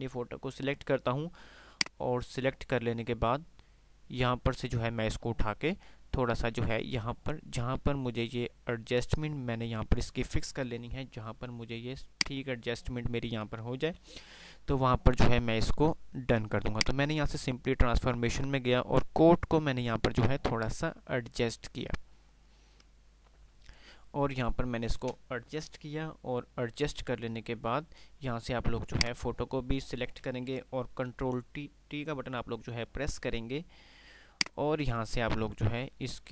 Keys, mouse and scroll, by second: 0.6 click.